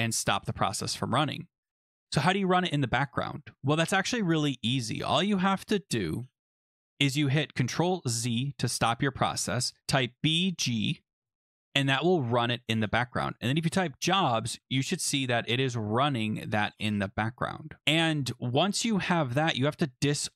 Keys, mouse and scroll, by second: 1.5 click, 3.3 scroll down 3, 3.6 scroll, 4.8 click, 8.0 ctrl+z, 10.1-11.2 typing, 13.2-14.5 typing, 17.8 scroll down 5, 18.7 click.